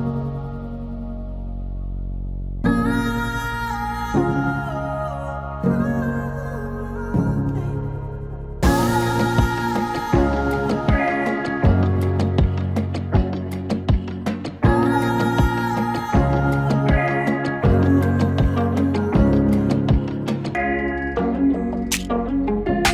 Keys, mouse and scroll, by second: 1.0-6.0 drag, 6.6 1, 7.8 click, 9.3-10.9 drag, 10.9 right click, 12.2 click, 15.2 click, 16.0 space, 18.6-20.0 drag, 22.8 4.